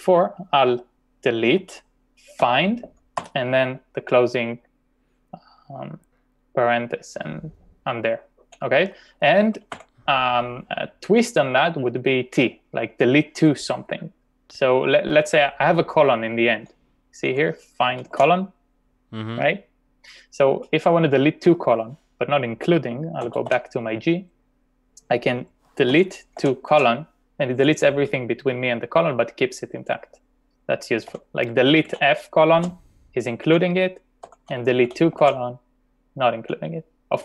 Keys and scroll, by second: 1.6 d, 2.5 f, 3.2 shift+0, 9.7 u, 17.7-18.6 typing, 23.0-24.0 typing, 25.7-27.3 typing, 31.2-32.6 typing, 34.2-35.2 typing.